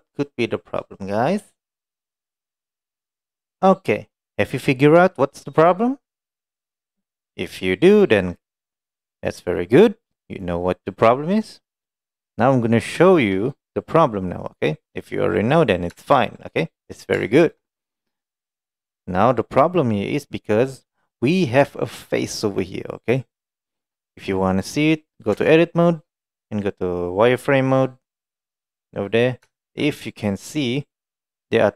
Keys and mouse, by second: 2.3-3.2 middle drag, 3.4 middle click, 10.7-11.7 middle drag, 12.1 middle drag, 13.1 shift+middle drag, 13.8-14.7 middle drag, 15.0-15.4 middle drag, 16.3 shift+middle drag, 16.5 middle click, 16.9 middle drag, 17.4 shift+middle click, 20.0 middle drag, 20.5 middle click, 21.1 middle drag, 25.4 Tab, 28.4 click, 28.9 middle click, 29.6 shift+middle click, 29.9-31.3 middle drag, 31.4 middle click.